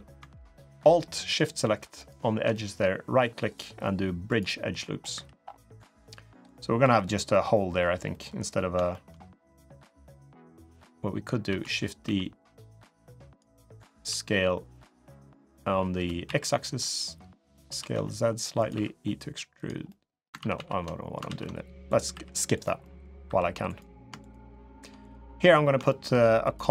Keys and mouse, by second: 1.1 alt+shift+click, 1.7 alt+shift+click, 2.3 middle click, 3.4 right click, 4.9 3, 5.5 middle click, 6.6 3, 7.3 click, 7.9 middle click, 8.7 shift+middle click, 9.2 middle click, 10.2 click, 11.2 shift+d, 11.8 s, 13.6 s, 17.4 s, 18.5 e, 19.6 middle click, 20.2 ctrl+z, 20.3 ctrl+z, 20.6 middle click, 21.0 ctrl+z, 21.9 3, 22.3 click, 22.6 click, 23.0 3, 23.4 click, 24.3 shift+click, 24.8 click, 25.6 shift+middle click.